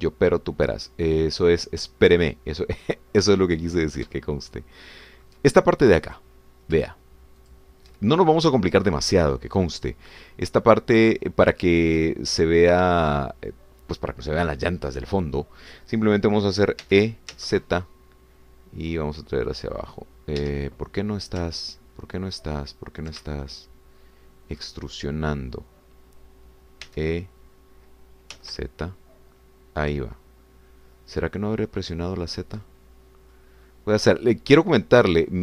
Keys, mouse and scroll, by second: 0.5-3.8 ctrl+middle drag, 4.3 ctrl+middle click, 5.2-6.4 ctrl+shift+middle drag, 7.2 click, 8.5 shift+click, 10.7-11.4 scroll down 2, 11.5-14.1 drag, 14.2-17.8 scroll up 2, 17.8 e, 18.3 z, 21.4 Escape, 22.5-24.2 ctrl+drag, 24.2 ctrl+shift+middle click, 24.6-25.8 shift+middle drag, 27.8 e, 29.4 z, 32.8 click, 33.3 scroll down 2, 33.6 middle click, 34.6 scroll down 2, 35.0-35.4 drag.